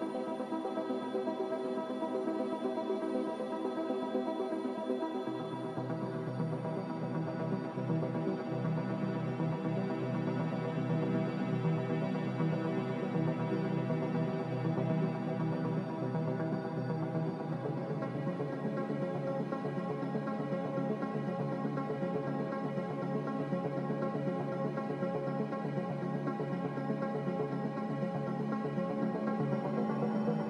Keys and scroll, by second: 0.8 z, 3.2 typing, 3.5 Return, 11.0 1, 11.0 5, 11.2 Return, 13.7-14.5 typing, 25.1 n, 30.2 ctrl+z.